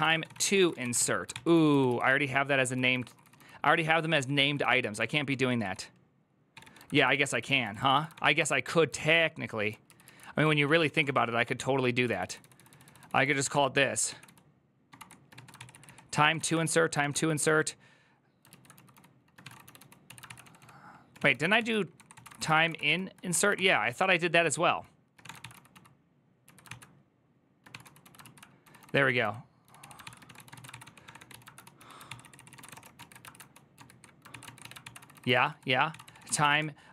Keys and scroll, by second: 0.0-1.3 typing, 1.3 ctrl+u, 1.9 ctrl+u, 2.5-9.2 typing, 4.5 ctrl+c, 4.6 ctrl+u, 7.9 ctrl+d, 9.7 ctrl+u, 9.8 ctrl+u, 10.9 ctrl+d, 11.9-23.0 typing, 15.4 ctrl+c, 15.5 ctrl+c, 23.1 Return, 23.3 ctrl+c, 24.7-36.9 typing, 26.4 ctrl+c.